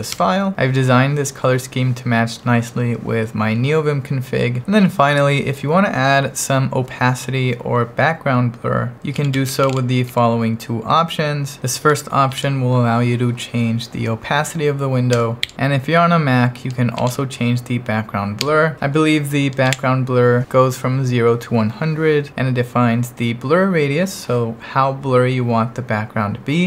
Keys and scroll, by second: 0.0-0.3 typing, 4.6 ctrl+1, 7.2 j, 7.7 j, 8.9-10.6 typing, 12.3 shift+v, 15.1 Escape, 15.4 j, 16.9 shift+v, 18.4 Escape, 19.7 shift+v.